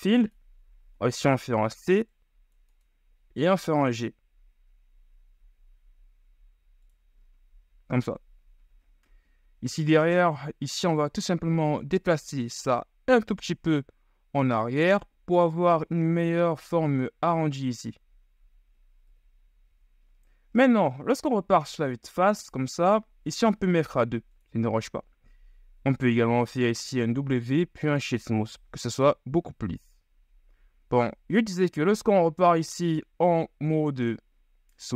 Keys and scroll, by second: 1.9 g, 19.4 KP_1, 19.7 z, 22.0 Tab, 27.4 w.